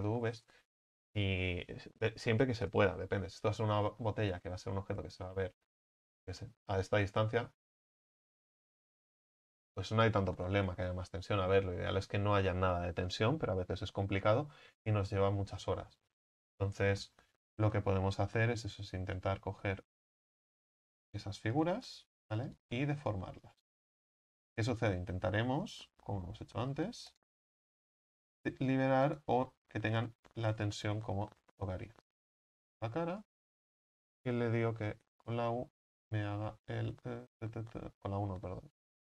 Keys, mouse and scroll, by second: 4.0-4.4 scroll down 7, 4.4 Tab, 4.8-5.3 scroll down 4, 5.3-5.8 middle drag, 5.8-6.2 scroll down 4, 6.4 scroll up 1, 6.5 middle drag, 6.7-8.9 scroll down 1, 8.9-11.4 scroll down 1, 11.4 Tab, 15.7-17.2 scroll up 9, 17.2-19.0 scroll up 1, 19.0-20.4 scroll up 1, 20.4-21.1 drag, 21.1-22.3 right drag, 22.3 s, 23.1-24.3 right drag, 24.3 s, 25.7-26.8 right drag, 26.8 s, 27.6 right click, 28.7 s, 29.5 scroll up 3, 32.2-33.2 drag, 33.2-39.0 right drag.